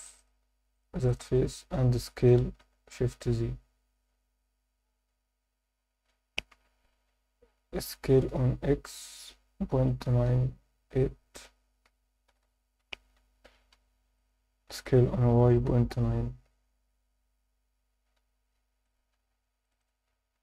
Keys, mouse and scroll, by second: 0.2 shift+click, 0.7 shift+click, 1.0 shift+click, 2.7 shift+z, 8.3 x, 13.7 5, 14.2 click, 15.3 y, 15.7 ., 16.0 9, 17.8 8, 18.8 click, 19.6 click, 19.8 click.